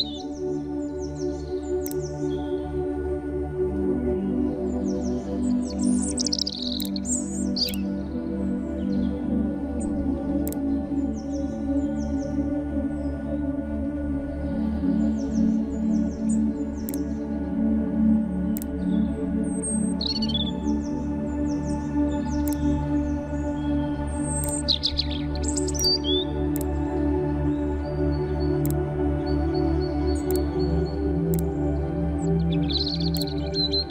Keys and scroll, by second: 0.2 shift+x.